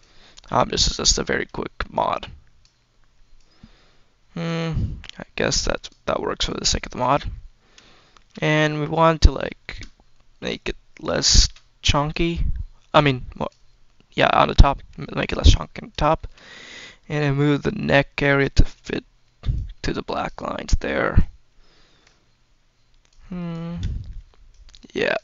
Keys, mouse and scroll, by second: 0.3 click, 1.8 click, 3.2-4.3 drag, 4.5-5.3 scroll up 2, 5.3 click, 6.3 click, 7.2-7.8 scroll down 4, 7.8 shift+middle click, 8.4 scroll up 1, 9.5 shift+middle click, 9.7-10.3 scroll up 2, 10.3 click, 11.1 shift+middle click, 11.9 click, 13.7 scroll up 1, 13.9 scroll down 2, 14.3 shift+middle click, 15.1 click, 16.0 shift+middle click, 16.2-17.0 scroll up 2, 17.7-19.0 drag, 19.4 click, 21.0 click, 22.1-22.9 scroll up 2, 22.9 click, 23.6 scroll down 1, 23.8 shift+middle click, 24.4 click.